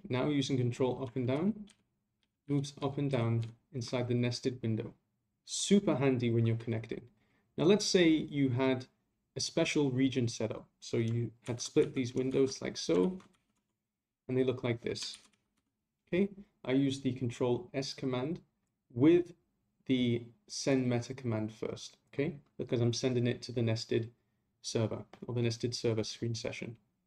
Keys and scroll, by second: 1.3 ctrl+Down, 1.7 ctrl+Up, 2.2 ctrl+Down, 2.4 ctrl+Up, 2.8 ctrl+Down, 3.1 ctrl+Up, 3.4 ctrl+Down, 11.4 ctrl+a, 13.0 ctrl+a, 15.1 ctrl+a.